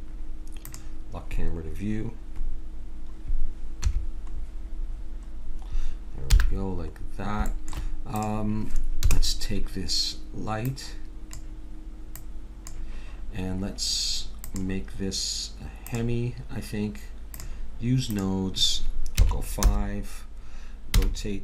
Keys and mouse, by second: 3.8 Home, 6.3 n, 8.1 click, 9.0 KP_0, 12.2-13.8 drag, 14.4-21.0 drag, 21.0 r.